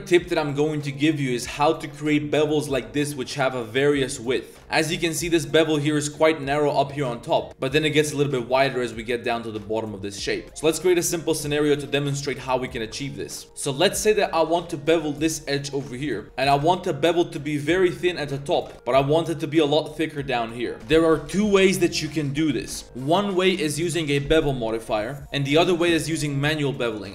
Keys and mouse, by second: 0.1 drag, 3.1-3.5 drag, 4.3 drag, 4.7 click, 5.4-5.7 drag, 7.3 click, 10.4 Tab, 10.4-12.3 typing, 10.7 click, 11.2 click, 11.6 shift+click, 12.0 click, 13.0 shift+click, 13.2 middle click, 13.4 middle click, 13.4 2, 13.4 z, 13.9 z, 14.8 alt+shift+click, 15.1 z, 15.7 middle click, 15.9 shift+middle click, 16.1 z, 16.2 click, 16.5 ctrl+b, 18.6 ctrl+z, 19.0 ctrl+b, 20.8 Tab.